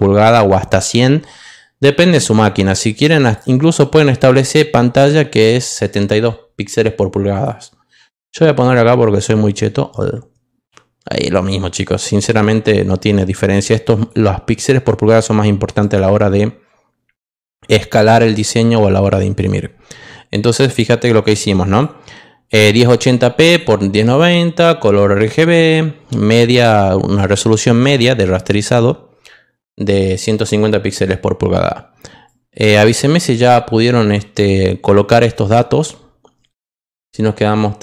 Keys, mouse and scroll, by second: 3.2 click, 5.6 click, 7.3 click, 8.5 click, 11.7 click, 12.2 click, 13.9 click, 15.8 click, 21.2 click, 22.6 click, 23.4 click, 32.2-34.4 drag.